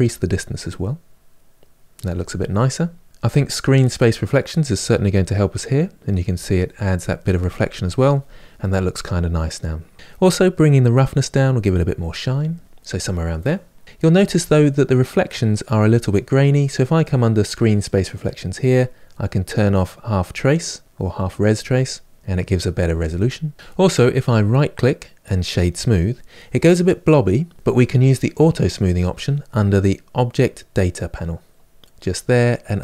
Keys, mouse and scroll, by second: 10.3-21.3 drag, 25.5-32.8 right drag.